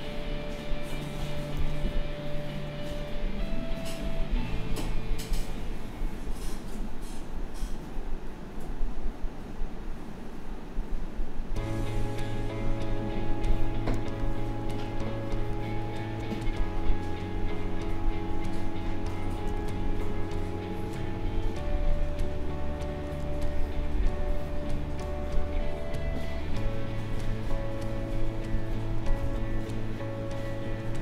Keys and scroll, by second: 1.5 ctrl+z, 13.9 space, 19.4 ctrl+z, 23.1 space, 29.2 ctrl+z.